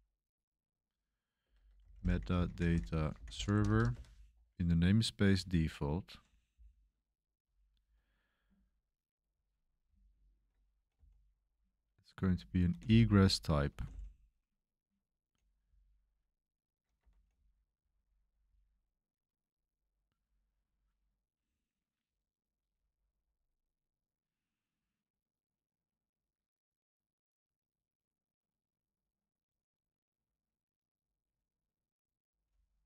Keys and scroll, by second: 0.0-4.4 typing, 3.9 Escape, 5.7-6.4 typing, 9.0-11.4 typing, 12.5-23.2 typing.